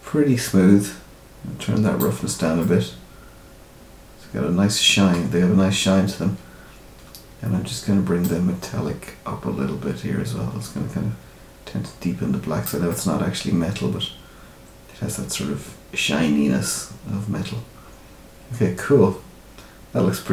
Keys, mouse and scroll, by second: 2.2 scroll up 2, 2.5 middle click, 5.1 scroll up 1, 5.2-5.6 scroll down 2, 8.2 click, 12.8 middle click.